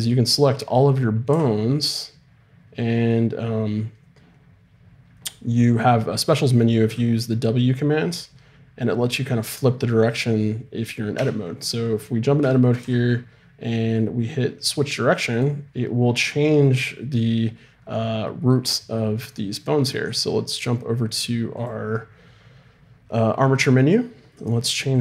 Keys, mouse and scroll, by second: 1.3 w, 6.9 w, 11.2 Tab, 12.8 w, 24.9-25.0 drag.